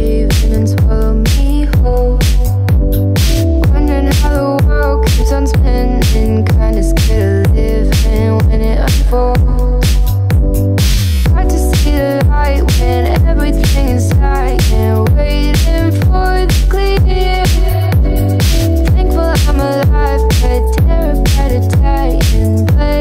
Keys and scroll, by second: 16.8 Right.